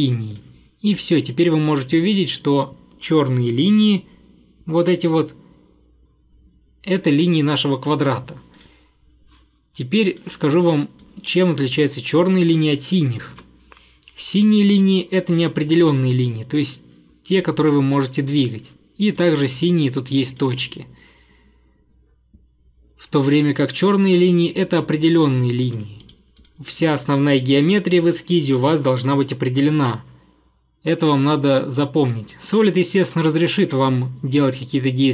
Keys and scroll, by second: 13.2 Escape, 26.1 Delete.